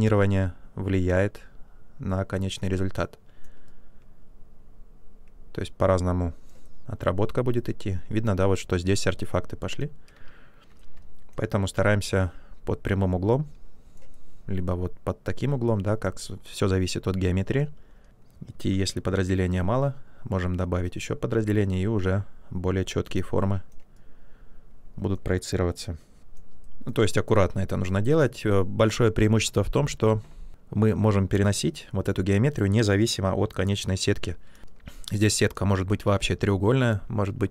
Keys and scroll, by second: 10.1 ctrl+z, 18.4 ctrl+d, 34.0 shift+f.